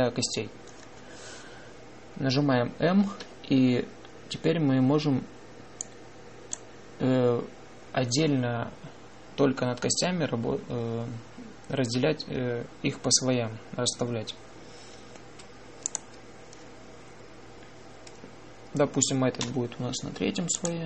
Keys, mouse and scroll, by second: 3.9 m, 16.7-18.4 drag, 20.3 m.